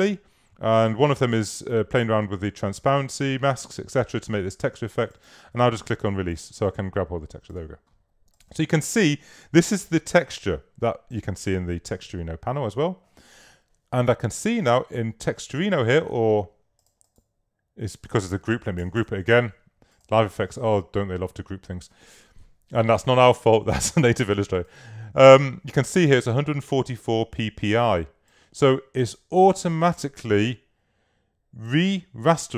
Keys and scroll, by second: 18.9 shift+super+g.